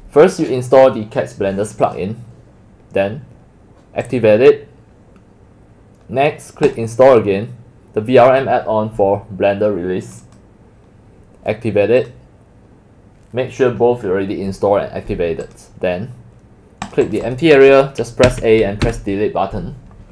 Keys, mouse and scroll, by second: 1.7 click, 1.9 click, 4.1 click, 6.7 click, 10.1 click, 10.3 click, 12.0 click, 15.5 click, 16.9 click, 17.3 click, 18.3 a, 18.9 Delete.